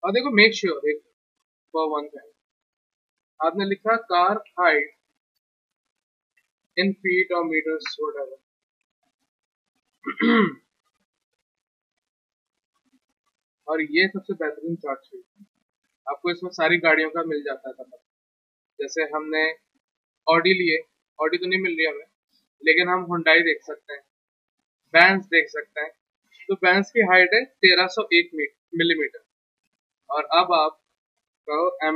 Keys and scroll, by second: 1.9 ctrl+t, 3.4-5.4 typing, 6.3 Down, 7.3-9.5 typing, 31.4-31.9 typing.